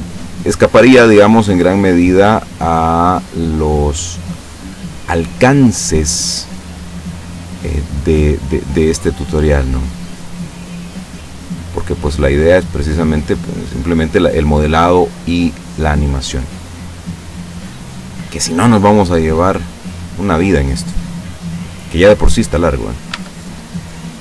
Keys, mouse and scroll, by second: 1.4-5.3 drag, 5.4-6.9 middle drag, 10.2 right click, 11.2-13.2 drag, 13.2 scroll up 1, 13.3-18.5 middle drag, 19.0-23.2 middle drag, 23.2 Tab, 23.5-24.2 middle drag.